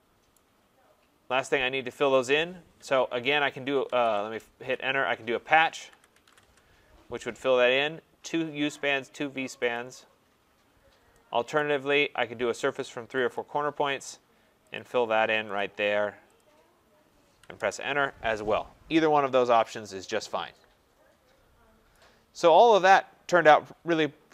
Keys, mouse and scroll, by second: 0.3 right click, 0.8 middle click, 0.9 scroll, 3.4 p, 3.8 BackSpace, 4.2 Return, 5.1-6.7 typing, 5.6-6.0 scroll down 2, 11.6 click, 11.6 middle click, 11.6 right click, 13.3 click, 14.8 click, 15.6 click, 16.4 click, 17.6 Return, 18.4 scroll, 19.1-20.2 scroll, 19.7 click, 21.9 right click, 22.1 scroll.